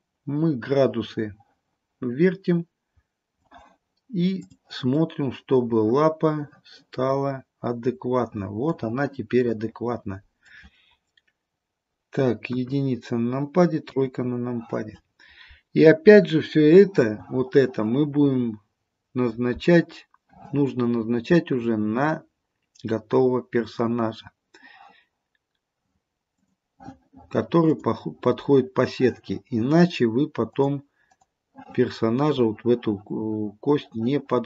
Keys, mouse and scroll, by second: 4.6 click, 5.0 middle click, 7.0 middle click, 13.9 KP_1, 13.9 KP_3, 22.8-23.5 scroll up 1, 23.5 scroll down 1, 26.4 click, 27.8 click, 30.6 click, 31.1 click.